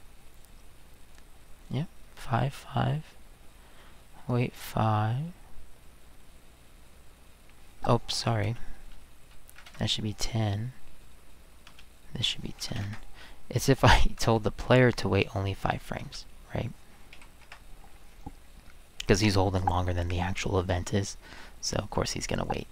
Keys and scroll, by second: 8.4-10.1 typing, 11.7-12.7 typing, 12.8 Return, 14.2 space, 16.0-17.6 typing.